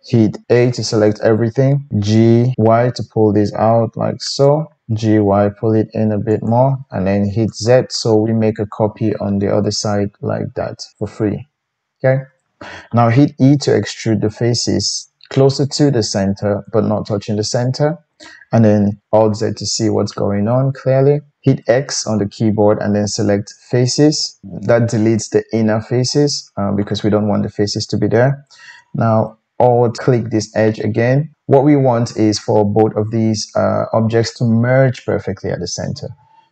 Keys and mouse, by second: 0.4 Tab, 0.4 a, 4.5-7.5 middle drag, 4.9 g, 7.5 click, 7.8-12.7 middle drag, 13.6 e, 19.3 alt+z, 21.8 x, 22.7-36.5 middle drag, 23.9 typing.